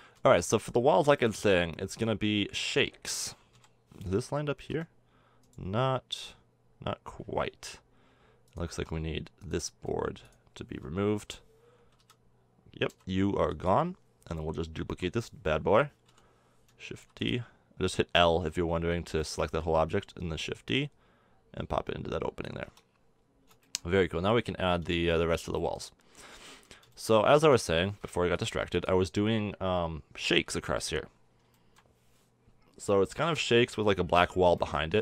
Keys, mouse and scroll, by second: 0.9 middle click, 1.1 middle drag, 1.9 z, 3.5 KP_7, 4.6 z, 5.4-7.8 middle drag, 8.0 middle click, 8.7 Tab, 11.1 l, 11.9 z, 12.8 x, 14.9 k, 16.0 l, 16.9 shift+d, 18.9-22.4 middle drag, 22.5 a, 22.6 Tab, 22.9-23.9 middle drag, 26.1-27.5 middle drag, 30.3 KP_1, 33.6-35.0 middle drag.